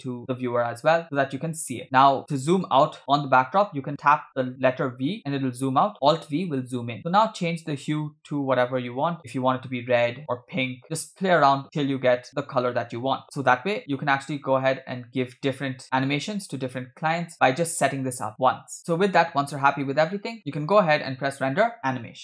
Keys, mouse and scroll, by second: 0.9-1.6 scroll down 1, 1.6 scroll down 2, 3.7-5.2 typing, 5.9 alt+v, 6.1 alt+v, 6.5 alt+v, 6.6 alt+v, 6.9 alt+v, 7.0-7.9 scroll up 3, 7.9 scroll up 1, 7.9-9.2 drag, 10.3-13.2 drag, 14.0-14.6 scroll down 2, 14.9-15.4 scroll down 3, 15.4 middle click, 16.3 alt+v, 16.9 alt+v, 17.5 v, 18.7 alt+v, 18.8 click, 18.8 scroll down 3, 18.8-20.3 scroll up 1, 20.3-20.9 scroll up 1, 20.9-22.2 drag.